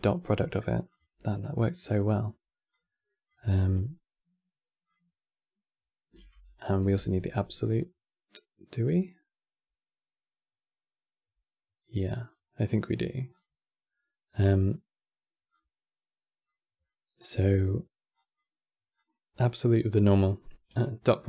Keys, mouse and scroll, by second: 2.4 click, 3.3-6.2 drag, 7.0 shift+d, 13.0-16.0 drag, 16.1-17.8 middle drag, 17.8 click, 18.6 click, 21.1-21.2 drag.